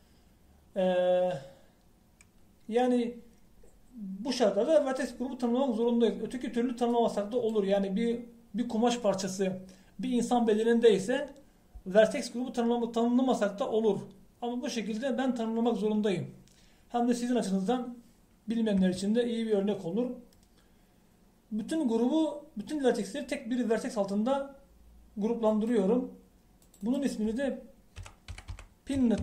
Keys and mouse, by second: 0.5-3.2 drag, 8.0-19.9 middle drag, 19.9 a, 26.5-29.2 drag.